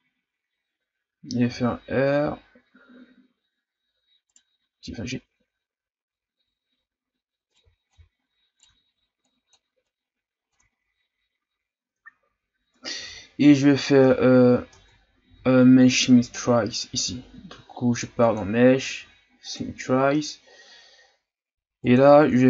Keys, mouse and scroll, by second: 1.5 r, 4.7 g, 7.6 r, 7.9 g, 8.7 ctrl+z, 9.2-10.5 drag, 10.5 Tab, 11.0-11.5 scroll down 1, 11.5-11.9 scroll up 2, 12.1-13.0 scroll down 1, 13.0 a, 13.4 a, 13.9-14.4 scroll down 2, 14.4-14.7 shift+scroll up 1, 14.7 Tab, 15.1 a, 15.2 a, 18.2-22.4 drag.